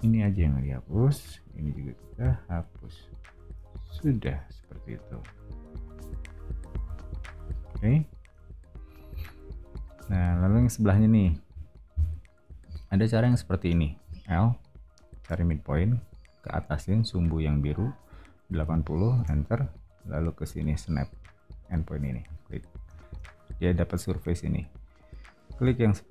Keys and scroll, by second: 3.8 o, 14.0 l, 18.6-19.3 typing, 23.9 space.